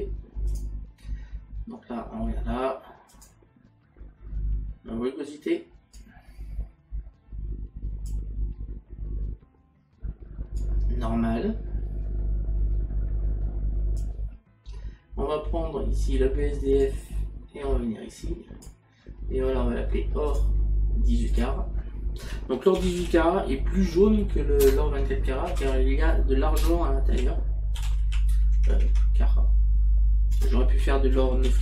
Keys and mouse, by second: 3.2 click, 5.9 click, 21.8 click, 23.0 r, 27.3 a, 28.6 BackSpace, 31.2 c.